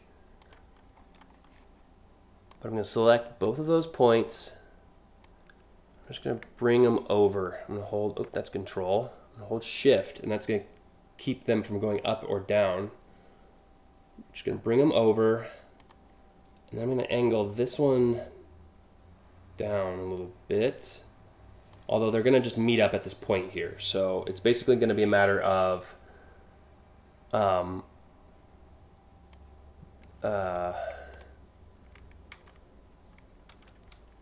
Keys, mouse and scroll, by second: 0.1 click, 0.6-1.1 scroll down 2, 2.2-3.1 drag, 4.9-14.5 drag, 15.4 click, 16.6-21.4 drag, 28.9-30.1 drag, 30.8 click, 31.9 ctrl+z, 34.1 ctrl+alt+z.